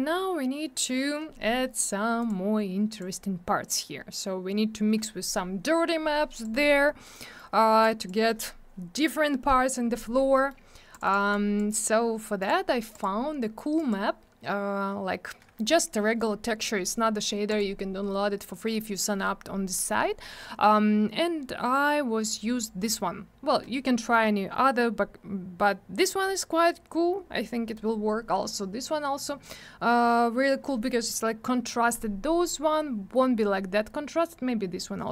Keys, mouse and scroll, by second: 2.2 click, 2.2 click, 2.9 click, 3.0 click, 6.3 click, 6.4 click, 7.2 middle click, 7.3 middle click, 7.8 click, 10.3 middle click, 10.4 middle click, 10.9 click, 10.9 double click, 11.0 click, 11.1 click, 11.3 click, 12.4 click, 12.4 click, 12.9 click, 13.0 click, 13.7 click, 13.9 click, 17.5 click, 17.5 click.